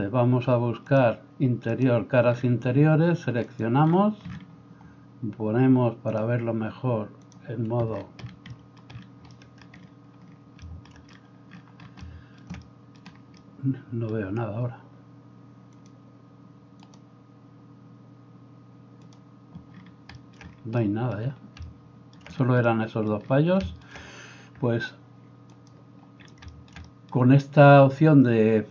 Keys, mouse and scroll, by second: 0.9-2.0 drag, 2.0-3.5 middle drag, 3.5-19.0 drag, 9.0 right click, 13.8 right click, 19.0 middle click, 19.1 click, 19.2-25.6 middle drag, 25.6-28.7 drag.